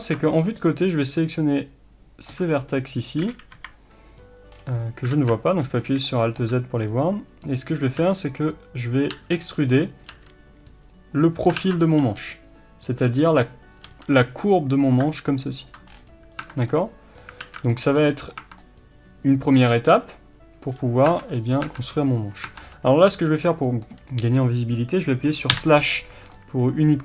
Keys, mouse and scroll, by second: 0.0 click, 3.5 KP_3, 4.5-4.9 scroll down 1, 5.1 alt+z, 5.8 scroll up 1, 6.0-9.1 shift+middle drag, 8.0 e, 10.9 click, 11.6 ctrl+z, 12.1 g, 15.9-16.4 scroll down 1, 16.4 Tab, 16.5 scroll down 1, 16.7-27.0 middle drag, 17.4 alt+z, 18.4 Tab, 20.7-21.1 scroll down 1, 21.1 Tab, 24.1-24.9 scroll up 1, 25.5 KP_Divide.